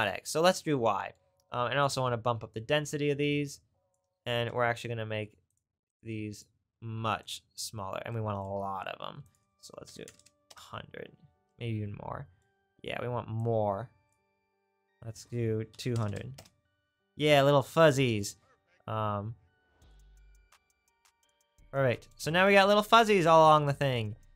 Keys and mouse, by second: 2.6-17.7 drag, 10.1 KP_0, 16.0 KP_0.